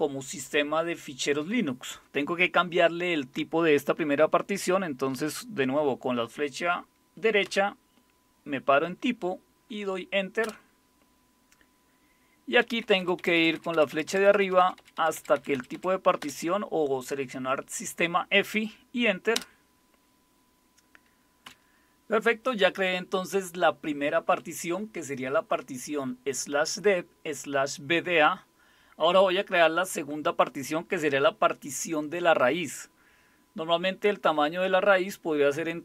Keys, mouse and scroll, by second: 7.4 Right, 10.4 Return, 12.6 Up, 12.8 Up, 13.0 Up, 13.2 Up, 13.3 Up, 13.7 Up, 13.9 Up, 14.2 Up, 14.4 Up, 14.6 Up, 14.8 Up, 15.0 Up, 15.2 Up, 15.5 Up, 15.7 Up, 19.3 Return, 21.4 Down.